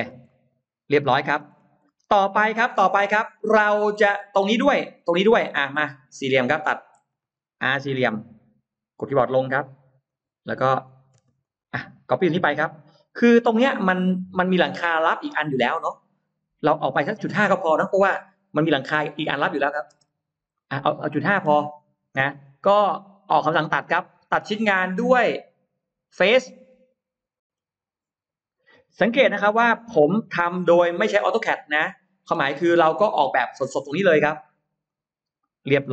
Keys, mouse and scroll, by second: 0.1-1.2 middle drag, 1.2-1.5 scroll down 1, 1.6 scroll up 1, 1.8-2.8 middle drag, 3.0 scroll down 1, 3.4-4.0 scroll up 1, 3.8 middle click, 4.9 middle click, 5.3 middle click, 6.1-6.8 scroll up 4, 7.0 middle click, 7.5 middle click, 8.0 r, 9.1 Down, 9.9 click, 10.7 click, 11.0 space, 11.3 click, 11.6 click, 12.0 middle click, 12.2 m, 12.3 click, 13.4 middle click, 13.6-14.2 scroll down 2, 14.6 middle click, 18.4 typing, 19.0 Return, 20.0 space, 20.3 scroll up 1, 20.4 middle click, 21.5 click, 25.9 click, 27.0-27.4 scroll up 2, 29.6 click, 30.8-31.2 scroll up 2, 31.7 click, 32.1 scroll down 2, 32.5 middle click, 33.0-33.3 scroll down 2, 34.6 e, 34.7 click, 35.6 space, 35.8-35.9 scroll up 2.